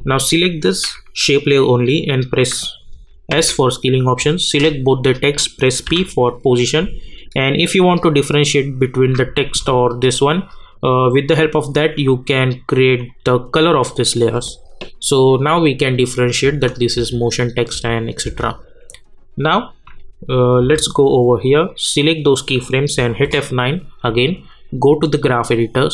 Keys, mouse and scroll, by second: 0.0 click, 3.3 s, 4.4 click, 4.9 shift+click, 5.8 p, 11.7 click, 15.6 click, 16.4 space, 17.1 space, 20.6 j, 21.6-23.0 drag, 23.0 F9, 24.9 click.